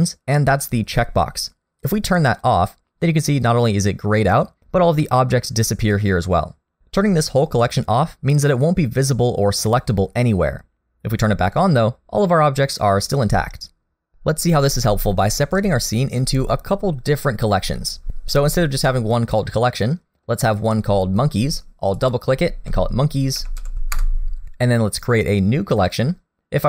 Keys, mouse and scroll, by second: 1.9 click, 11.5 click, 15.1-15.6 scroll up 2, 15.8 shift+middle click, 19.3 middle click, 19.3-19.8 scroll down 1, 21.9 click, 22.1 click.